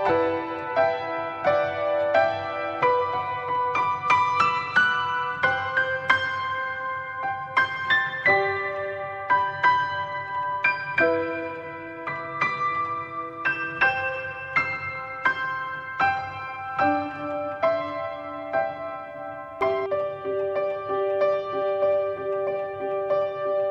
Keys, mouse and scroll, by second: 0.0 click, 1.1 click, 3.5-6.5 middle drag, 6.5 click, 6.6 scroll down 4, 6.8-9.3 middle drag, 9.3 click, 9.9-12.2 drag, 13.2 click, 15.3-15.7 scroll up 5, 15.7-17.9 shift+middle drag, 17.9 click, 21.8-22.1 scroll down 5, 22.1-23.7 middle drag.